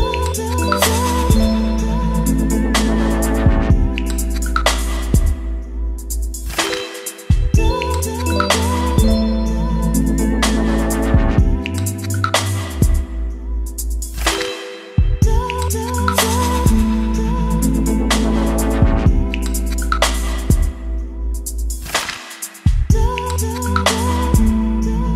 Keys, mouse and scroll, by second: 0.0-1.4 typing, 3.2 click, 3.7 Return, 5.0 click, 6.2 ctrl+c, 6.6 click, 7.0 Return, 7.3 ctrl+v, 8.2-13.8 drag, 13.8 Return, 14.6 s, 14.7 e, 14.9 t, 16.0 s, 16.2 t, 16.5 y, 17.2 Down, 17.4 Return, 17.7 Left, 18.0 Return, 19.2-21.5 typing, 22.8-24.9 typing.